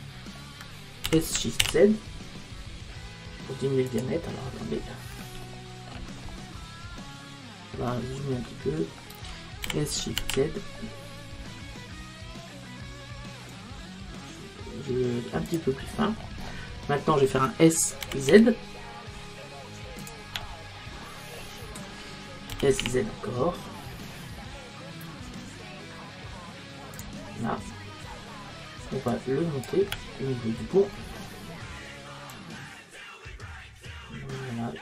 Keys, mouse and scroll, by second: 0.7 middle click, 1.1 s, 4.0 click, 5.5-10.3 middle drag, 9.7 s, 15.9-18.5 middle drag, 18.1 s, 20.1 click, 22.0 middle click, 22.6 s, 27.1 click, 28.9 middle click, 29.1-30.5 drag, 30.5-32.2 middle drag, 32.4 click.